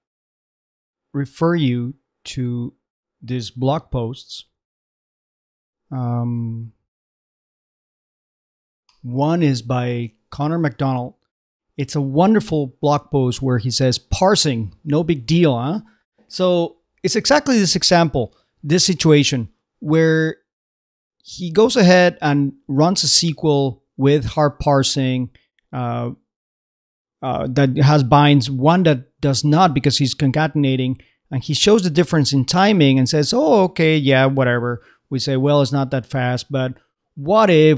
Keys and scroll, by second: 4.7 shift+super+v, 5.5 shift+super+Escape, 6.2 alt+shift+super+Escape, 6.4 alt+super+v.